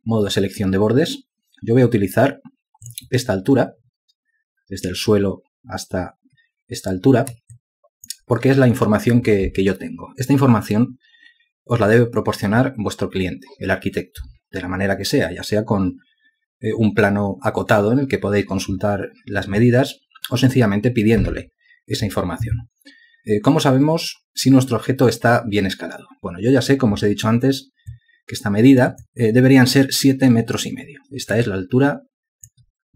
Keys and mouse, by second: 7.7 alt+click, 31.7 alt+click.